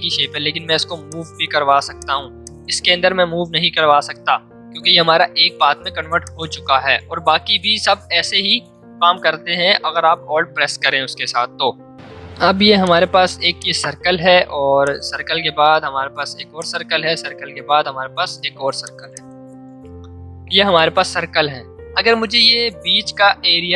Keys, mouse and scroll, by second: 1.6 v, 1.9 click, 6.2-9.0 drag, 9.7 l, 12.4 v, 12.8 click, 14.8-16.5 alt+drag, 16.5-23.4 alt+drag.